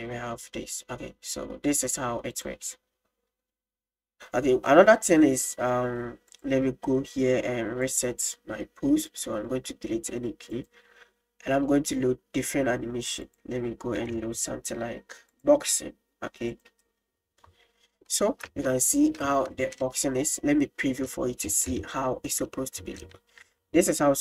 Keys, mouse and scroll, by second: 2.5 drag, 6.3 click, 7.9-8.2 drag, 9.1 click, 10.5 click, 13.3-15.4 drag, 16.5-17.2 drag, 18.1 middle drag, 18.6 space, 20.3 click, 21.8-22.3 shift+middle drag, 23.1 shift+middle click.